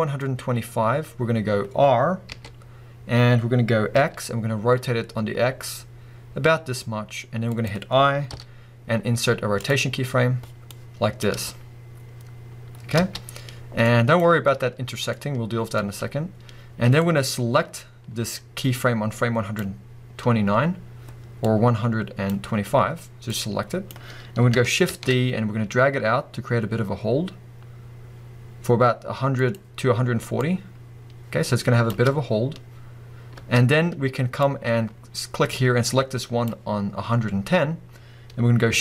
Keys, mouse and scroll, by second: 1.4-2.3 scroll up 2, 2.3 r, 7.7 click, 10.7-15.1 drag, 11.4 space, 13.0 space, 15.1-17.0 middle drag, 17.0-29.5 drag, 24.9 shift+d, 30.4-38.8 drag, 31.9 space, 33.4 space.